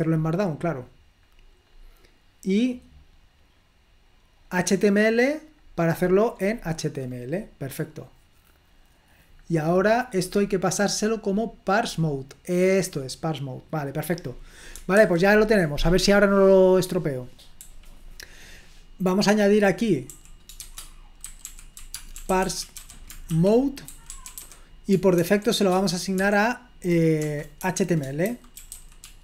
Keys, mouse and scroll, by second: 0.2 click, 1.3-2.4 scroll down 1, 4.4 click, 6.0-7.7 scroll up 2, 9.4-10.1 scroll up 2, 10.3-11.9 scroll up 2, 12.8 click, 15.0 super+1, 17.7-26.2 typing, 27.2-29.2 typing.